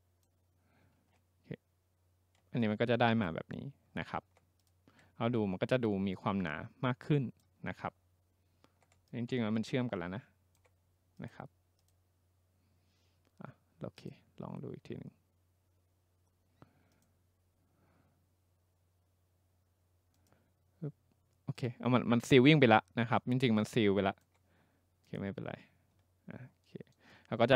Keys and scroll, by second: 1.0 ctrl+z.